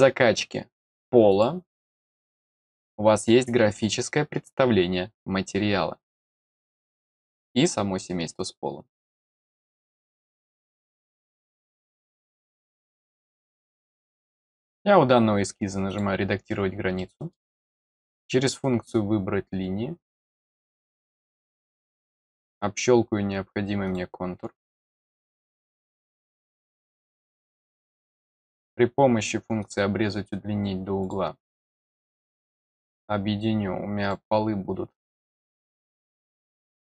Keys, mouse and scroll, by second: 1.2 click, 12.1 click, 13.1 click, 14.1 middle click, 14.5 scroll down 1, 15.8 click, 16.9 middle click, 18.1 click, 20.4 click, 21.5 click, 22.3 click, 23.8 click, 25.1 click, 26.3 click, 27.5 click, 29.5 click, 31.0 click, 31.5 click, 32.3 click, 32.8 click, 34.0 click, 34.9 click, 35.6 scroll up 1.